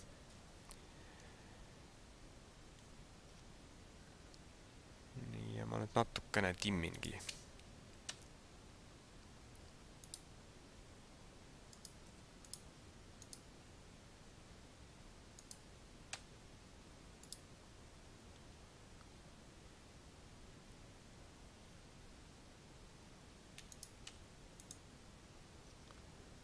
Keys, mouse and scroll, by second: 1.0-1.6 scroll down 3, 2.7 scroll up 2, 3.3 Tab, 4.0-4.7 scroll up 4, 7.0 right click, 8.1 v, 11.8 right click, 12.2 v, 13.2 right click, 15.4 right click, 16.0 v, 18.0-19.8 scroll down 4, 23.9 right click, 24.1 v, 25.7 Tab.